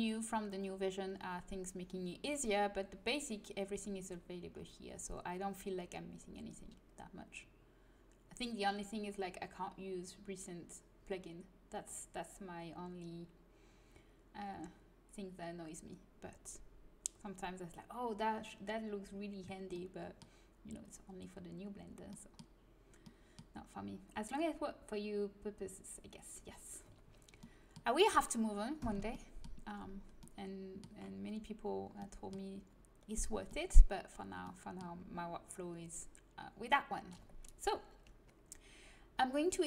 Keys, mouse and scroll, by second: 4.5-9.4 middle drag, 19.7-21.8 middle drag, 22.1-26.9 middle drag, 27.4-31.1 middle drag.